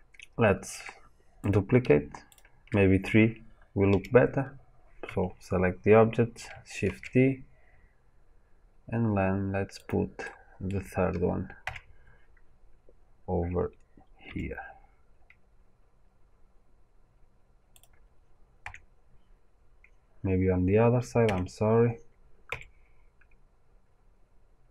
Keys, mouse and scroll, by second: 1.4 click, 2.3 shift+click, 3.8 g, 6.8 shift+d, 9.8 click, 10.1-17.7 middle drag, 14.2 g, 17.7 click, 22.4 g.